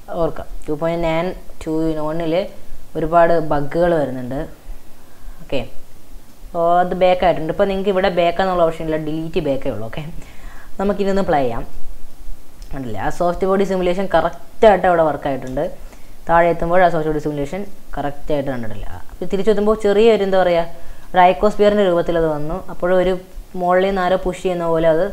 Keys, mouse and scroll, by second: 6.3-9.3 middle drag, 9.6-10.3 middle drag, 10.3 scroll up 2, 10.6-11.6 middle drag, 11.6 space, 11.8-16.1 middle drag, 16.1-16.5 scroll up 1, 16.5-20.3 middle drag, 20.3 space, 20.5-21.1 middle drag, 21.1 space, 23.1-23.5 middle drag, 23.5-24.1 scroll up 1, 24.1 space.